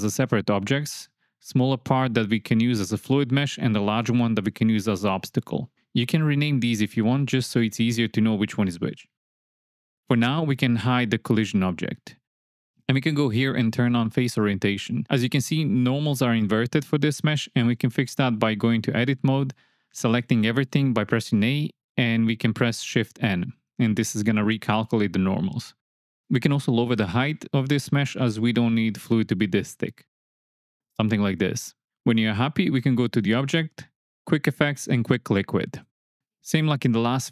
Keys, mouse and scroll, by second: 0.6 Tab, 1.0 click, 2.1 g, 6.5-7.6 drag, 7.8 click, 10.8 click, 11.8 shift+middle drag, 12.7-15.6 drag, 16.4 Tab, 17.4 a, 18.7 shift+n, 21.7 KP_1, 22.4 Tab, 23.2 Tab, 23.4 alt+z, 24.2 click, 26.0 g, 26.6 z, 30.7 shift+click, 31.7 click, 32.0 alt+z, 33.4-34.1 drag, 34.3 click.